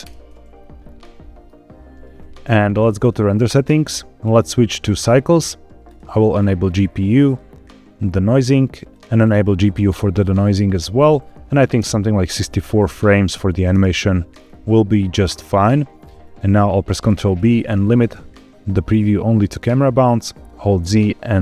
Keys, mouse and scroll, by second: 0.9 middle click, 2.9 click, 4.2-5.2 drag, 5.7-6.5 drag, 7.1 click, 7.5-8.2 scroll down 1, 8.2 click, 9.1-9.9 drag, 9.9-10.4 scroll up 1, 10.4-11.7 drag, 12.8 click, 14.3-14.7 scroll up 2, 16.1 scroll down 1, 16.9 ctrl+b, 20.6 z.